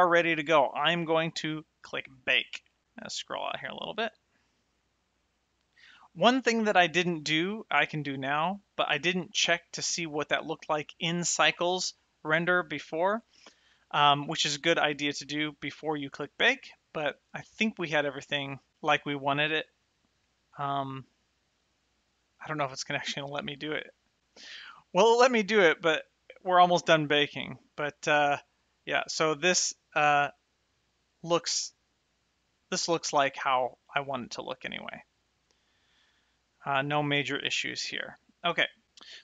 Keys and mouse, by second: 2.4 click, 8.5 click, 28.8 shift+middle click, 30.7 middle click, 35.8 shift+middle click.